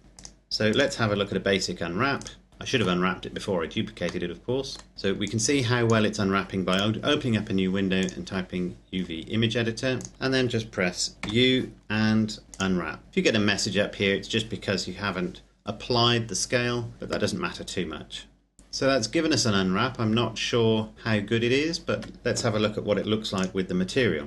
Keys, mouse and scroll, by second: 0.0 click, 1.0-1.9 scroll down 1, 1.9 right click, 2.5 shift+middle click, 4.0 middle click, 5.0 click, 8.8-9.7 scroll down 1, 9.7 click, 10.1-11.1 scroll down 1, 11.1 u, 12.4 click, 18.8-19.4 scroll down 1, 19.4-20.9 scroll up 1, 20.9-21.6 scroll down 1, 21.6 Tab, 22.8 click, 23.9-24.2 scroll up 1.